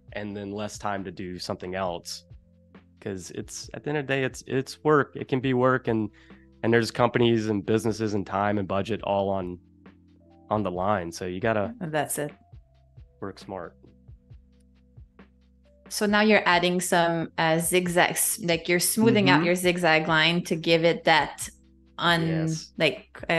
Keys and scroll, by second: 15.8 space, 21.6 space.